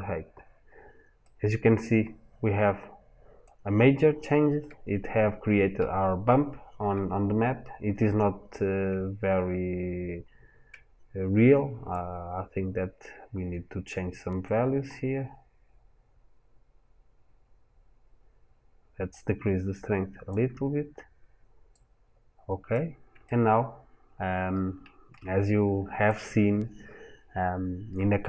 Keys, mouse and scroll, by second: 1.1 middle click, 12.0 click, 21.5 click, 23.1 shift+middle click.